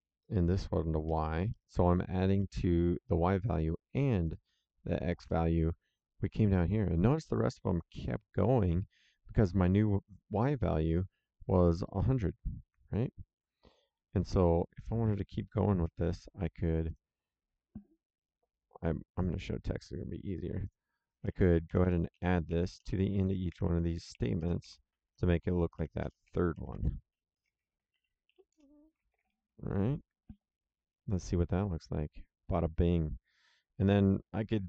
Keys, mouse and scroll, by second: 1.0 y, 4.0 click, 13.7 click, 15.8 ctrl+c, 16.8 click, 18.5 click, 20.6 click, 21.6 Down, 22.1 Up, 22.4 End, 22.7 Return, 23.1 ctrl+v, 23.5 Down, 24.1 End, 24.3 KP_Enter, 24.6 ctrl+v, 24.9 Down, 25.7 End, 26.0 KP_Enter, 26.2 ctrl+v, 26.5 Down, 27.0 End, 27.3 KP_Enter, 27.5 ctrl+v, 27.7 Down, 28.2 End, 28.4 KP_Enter, 29.0 ctrl+v, 31.1 click.